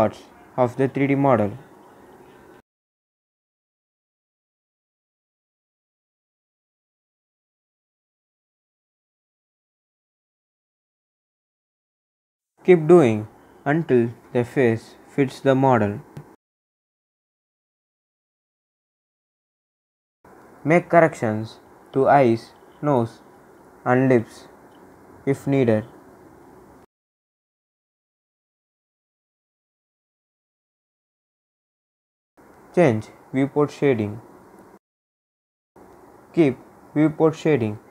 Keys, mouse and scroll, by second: 20.6 scroll up 1, 21.3-22.0 scroll up 1, 25.4-28.9 drag, 28.9-30.7 scroll down 1, 30.7 click, 31.5 scroll down 1, 33.1 click, 35.3-35.8 scroll up 1, 35.8 scroll down 1, 36.8 click, 37.6-37.9 scroll down 1.